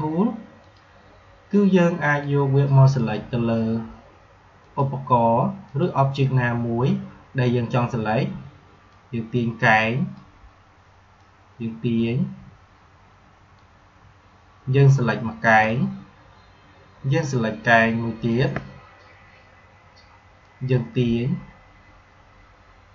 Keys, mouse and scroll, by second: 8.7-17.5 drag, 17.5-22.9 shift+drag.